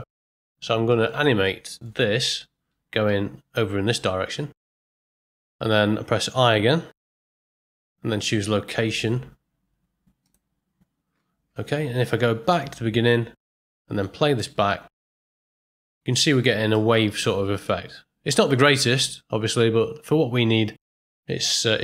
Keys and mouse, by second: 0.9 ctrl+middle click, 1.2 shift+middle drag, 1.7 middle click, 3.0 g, 6.9 i, 12.4 shift+Left, 13.8 middle click, 14.4 space, 16.7 middle click, 17.1-21.8 ctrl+middle drag.